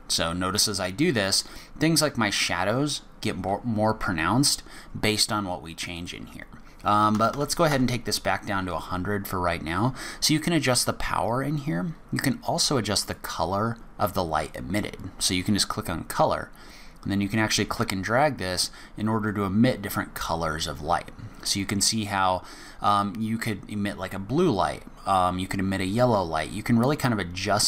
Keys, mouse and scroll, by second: 5.9 click, 7.3 KP_0, 13.0 click.